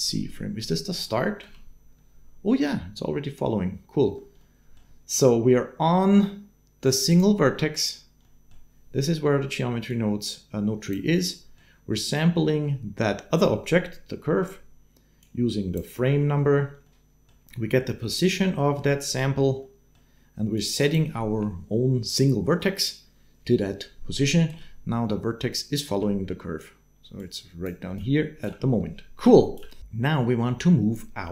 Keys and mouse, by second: 1.2 space, 4.0 space, 4.4 middle click, 6.9 click, 8.0 click, 9.8 click, 11.3 click, 15.0 click, 16.9 middle click, 18.3 middle click, 19.4 middle click, 20.4 middle click, 24.3 space, 26.0-29.0 typing, 27.0 click, 29.0 click.